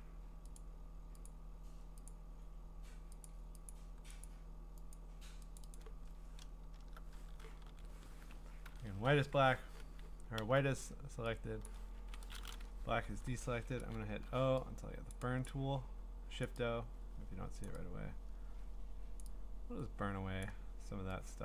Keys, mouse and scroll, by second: 0.6 click, 1.2 click, 2.1 click, 3.2 click, 3.7 click, 4.2 click, 4.9 click, 5.6 click, 5.7 click, 6.6 alt+BackSpace, 7.6 ctrl+d, 8.6 ctrl+i, 10.4 b, 11.7 click, 12.0 ctrl+z, 13.2-14.1 typing, 15.1 click, 15.5 click, 16.4 click, 17.6 click, 19.2 click.